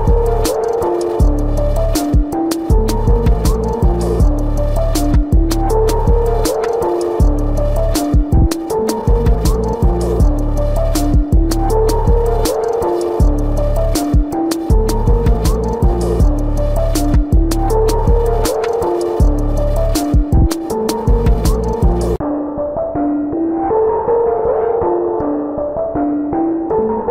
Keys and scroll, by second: 0.6 space, 1.9 ctrl+-, 2.3 space, 3.6 ctrl+-, 9.5 space, 10.3 ctrl+-, 11.1 ], 11.5 ], 11.9 space, 12.5 ], 14.2 ctrl+-, 16.1 space, 16.3 ctrl+=, 16.7 space, 17.9 ctrl+=, 23.8 space, 24.4 ctrl+alt+z, 25.1 space.